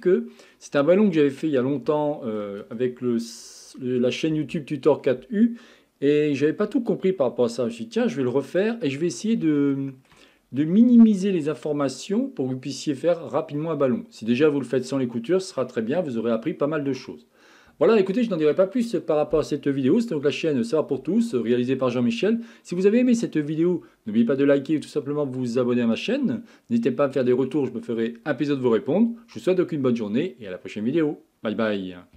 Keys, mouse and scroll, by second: 0.0 click, 0.5-0.9 scroll down 3, 0.9-8.6 shift+middle drag, 8.6-9.0 scroll down 2, 9.0-9.6 scroll up 2, 9.6-15.8 shift+middle drag, 15.8-16.5 scroll up 5, 16.5-17.4 shift+middle drag, 17.4-17.8 scroll down 3, 17.8-32.1 shift+middle drag.